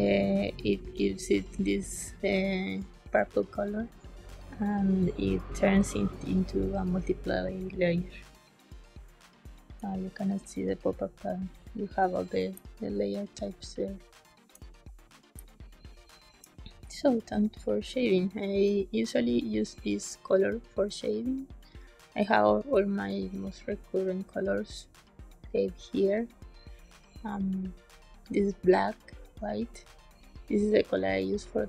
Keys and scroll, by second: 12.5 space, 15.3 space.